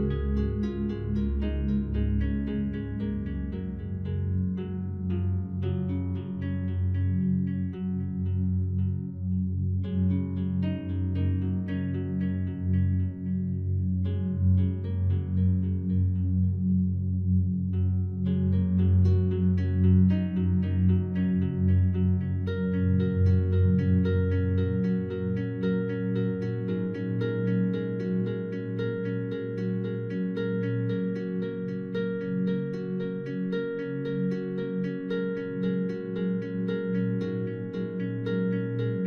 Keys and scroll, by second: 18.3 ctrl+0.